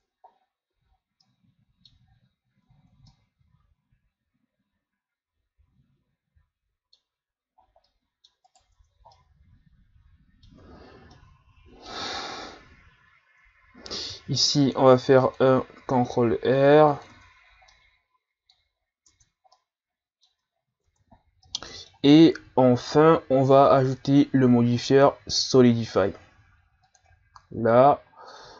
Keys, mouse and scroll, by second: 0.3-1.2 scroll down 6, 0.7 a, 1.2-2.1 middle drag, 2.1-2.6 scroll up 5, 2.7-3.1 scroll down 5, 3.1-6.1 middle drag, 7.3-7.6 scroll up 1, 7.6 scroll down 1, 7.8-8.5 middle drag, 8.5 right click, 8.7 Tab, 9.1-10.6 middle drag, 10.6 Tab, 11.1 middle click, 12.0 Tab, 14.1 ctrl+r, 17.1 Tab, 17.5 scroll down 2, 17.7-18.7 middle drag, 18.7-19.1 scroll up 2, 19.1 Tab, 19.6 middle click, 20.5-20.9 scroll down 3, 20.9 Tab, 21.2 scroll down 2, 21.4-23.9 middle drag, 23.9-27.8 drag, 28.3-28.5 drag.